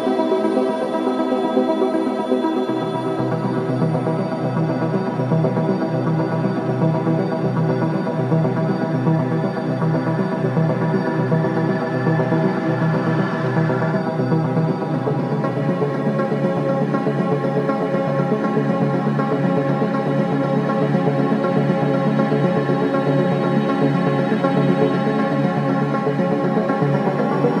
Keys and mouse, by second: 1.2 space, 2.8 ctrl+s, 3.4 ctrl+alt+click, 4.3 click, 4.7 click, 5.6-5.9 alt+shift+drag, 6.2 ctrl+alt+drag, 6.9 click, 7.9 click, 9.0-13.0 drag, 13.7-15.1 typing, 16.3 Right, 16.6 Right, 16.7 Right, 17.7-20.0 drag, 20.1 i, 22.1 Right, 22.2 Right, 22.4 Right, 23.4-23.9 drag, 24.8 drag, 25.7 typing, 26.5-27.6 drag.